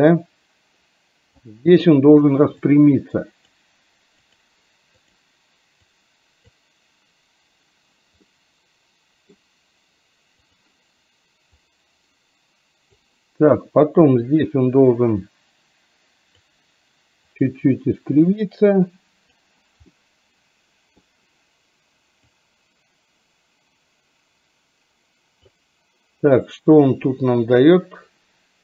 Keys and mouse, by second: 2.8 click, 6.0 click, 8.3-9.5 middle drag, 11.7-13.1 drag, 14.2-16.5 drag, 17.5 click, 18.5 click, 20.0-21.1 middle drag, 22.4-25.6 drag, 27.3-28.6 drag.